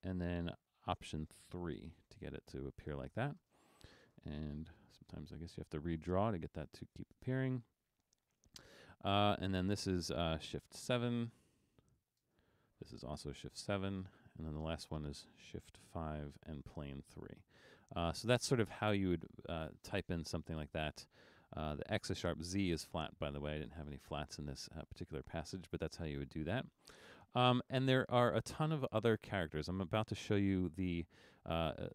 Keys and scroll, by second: 1.7 alt+3, 3.5 space, 4.8 super+d, 11.8 shift+7, 12.3 space, 14.2 shift+7, 14.8 space, 16.0 shift+5, 17.0 3.